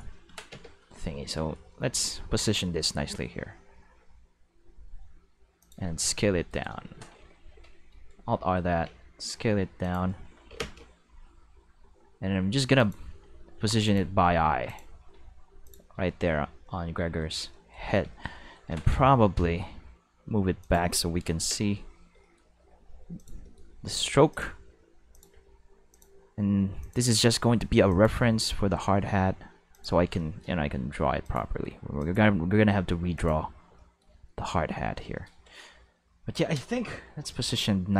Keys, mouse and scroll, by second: 0.5 Home, 1.7-2.4 middle drag, 3.2-3.7 middle drag, 3.7 r, 3.8 r, 5.1 middle click, 5.6 click, 5.8 s, 6.5 right click, 7.1 alt+r, 8.8 s, 9.8 click, 10.5 Home, 11.6 r, 12.7 click, 13.1 s, 13.8 click, 14.1 r, 14.6 click, 15.0 g, 15.6 click, 16.0 shift+middle drag, 16.3-18.0 middle drag, 18.7 g, 18.9 y, 20.6 click, 21.2 Home, 22.5 r, 23.1 click, 23.4 shift+middle click, 23.7 g, 24.3 click, 24.5 s, 25.1 click, 25.3 r, 25.9 click, 26.0 g, 26.8 click, 27.4 s, 27.9 click, 28.1 g, 29.7 click, 30.6 g, 31.2 click, 31.5 r, 32.0 click, 32.1 g, 33.1 click, 36.9 q.